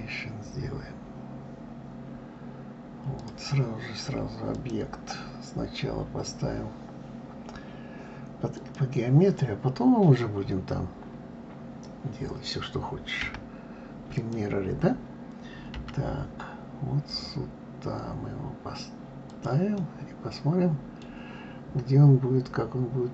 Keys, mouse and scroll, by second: 4.5-7.5 drag, 13.2 d, 14.1 click, 15.7 g, 19.8-22.8 middle drag.